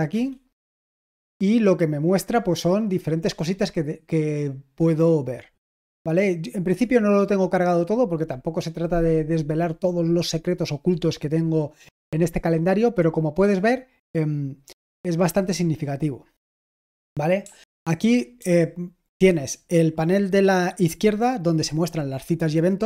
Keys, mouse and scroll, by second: 0.1 Return, 18.1-18.8 typing.